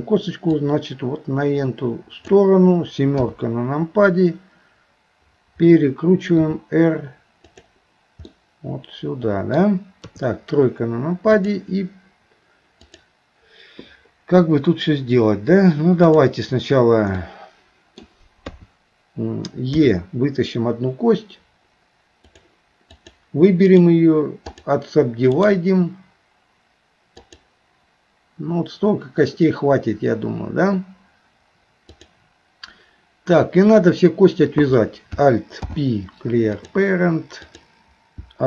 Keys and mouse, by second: 0.6-2.3 drag, 3.2 KP_7, 6.4 r, 8.4-9.6 middle drag, 10.1 KP_3, 11.4 click, 12.9 click, 17.2 middle click, 18.5 KP_3, 19.7 e, 23.0 click, 23.7 right click, 25.4-27.4 right drag, 35.6 alt+p, 37.4 click.